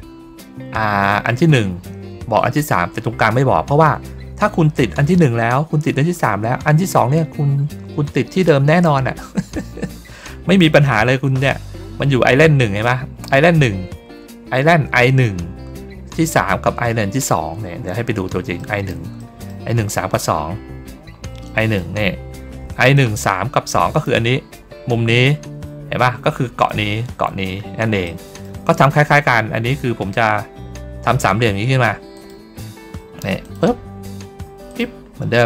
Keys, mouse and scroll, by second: 17.5 ctrl+middle click, 18.5 middle click, 19.1 middle click, 21.3 middle click, 21.9 ctrl+middle click, 22.8-23.9 middle drag, 27.9 middle click, 32.0 click, 33.3 click, 34.6 click.